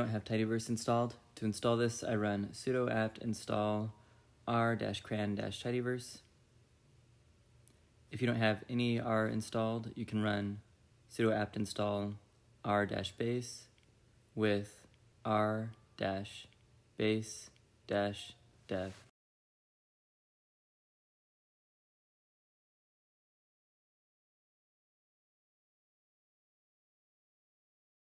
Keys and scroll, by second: 0.6 Return, 19.1-24.8 typing, 24.9 Return, 27.0 ctrl+l.